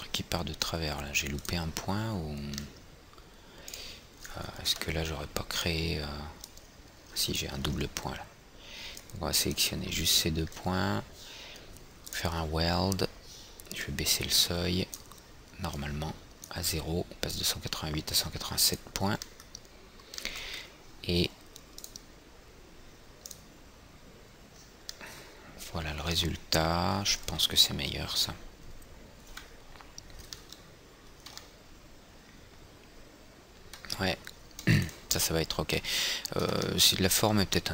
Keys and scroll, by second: 5.3 &, 8.3 ctrl+z, 29.8 F4.